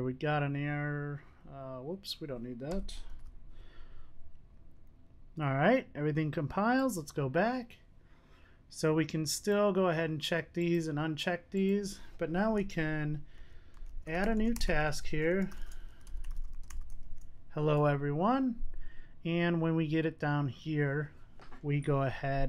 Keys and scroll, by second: 3.2 super+s.